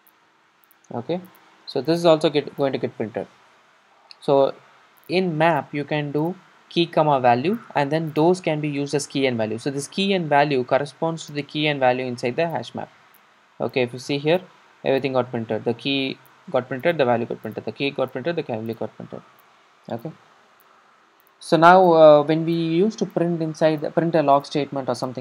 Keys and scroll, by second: 2.7 super+r.